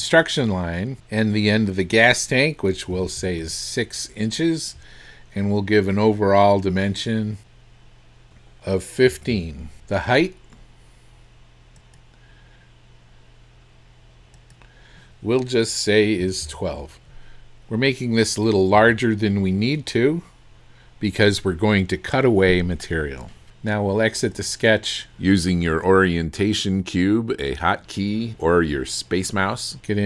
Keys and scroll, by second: 3.0 KP_6, 3.5 Return, 4.1 Return, 9.1 KP_1, 9.3 KP_5, 16.2 KP_1, 16.5 KP_2, 18.8 Return.